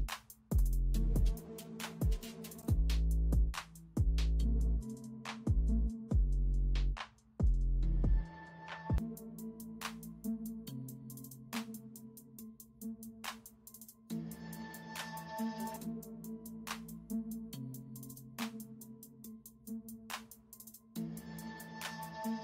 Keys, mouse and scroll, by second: 0.3-6.9 typing, 8.1 typing, 9.4 [, 9.8 ], 10.7 [, 21.6 space.